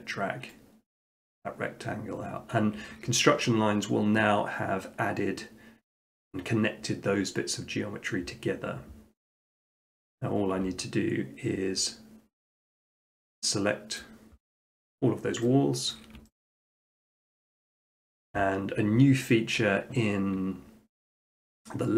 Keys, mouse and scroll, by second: 0.0 click, 1.0 click, 2.0 middle click, 2.5 middle click, 3.4 shift+middle click, 7.6-8.7 middle drag, 10.1-11.2 drag, 14.0 click, 15.9 middle click, 16.6 shift+middle click, 17.1-17.5 scroll, 17.7 shift+middle click, 17.9 shift+middle click, 20.6 middle click, 20.8 middle click, 21.3 scroll, 21.5 middle click.